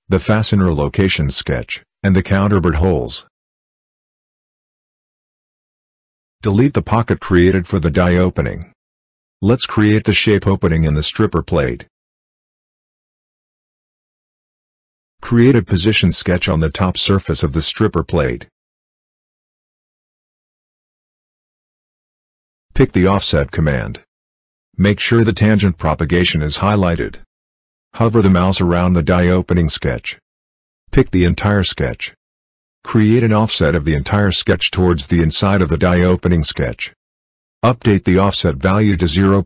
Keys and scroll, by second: 9.3 Delete, 36.0 Escape.